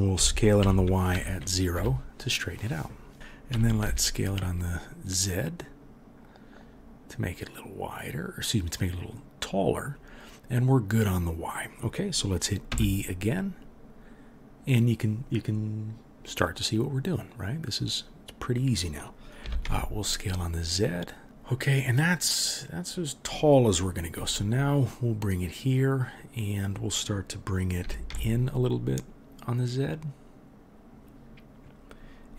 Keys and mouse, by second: 0.1 s, 3.1 KP_3, 3.5 s, 12.7 e, 19.4 s, 24.2 e, 27.8 s.